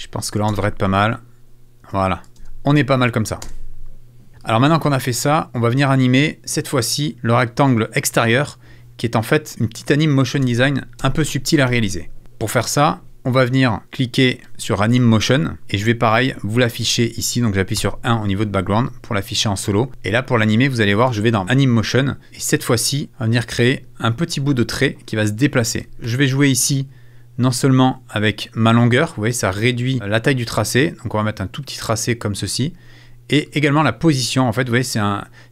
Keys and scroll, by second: 0.5 shift+space, 1.8 space, 10.4 space, 11.6 super+space, 11.7 super+s, 17.8 |.